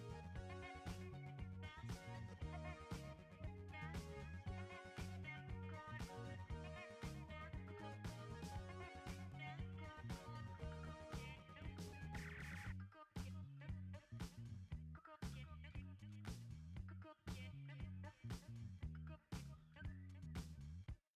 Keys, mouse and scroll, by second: 0.0 click, 2.4 click, 7.5 click, 13.4-21.1 alt+drag.